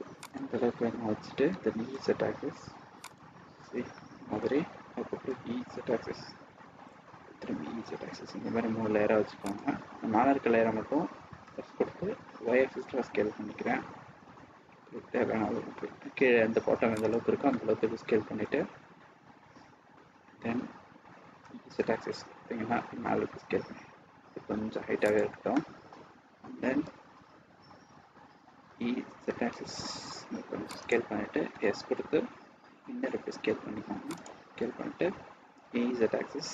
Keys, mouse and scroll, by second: 1.5 e, 3.5 scroll down 3, 3.8 middle click, 3.8 scroll up 1, 4.5-5.0 scroll down 1, 5.3 e, 11.7 s, 17.4 middle click, 17.4-17.8 scroll down 1, 18.4-18.9 scroll up 2, 18.9-19.3 scroll down 3, 21.4 e, 25.3 scroll down 1, 25.4 scroll down 1, 25.5 middle click, 26.9-27.3 scroll up 1, 27.7-28.1 scroll up 2, 28.6 e, 31.5 s, 35.5 e.